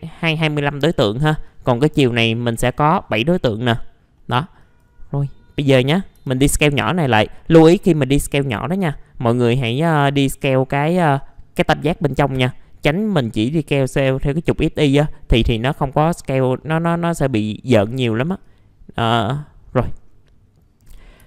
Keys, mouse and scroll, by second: 3.6 middle click, 3.8-4.2 scroll down 1, 4.2 middle click, 4.6 click, 5.3 scroll up 1, 5.6 middle click, 6.8-11.1 drag, 11.1 scroll up 1, 15.5 middle click, 16.5 scroll down 1, 17.8 w, 18.4-19.6 drag, 19.6-20.2 scroll up 1, 20.8 middle click.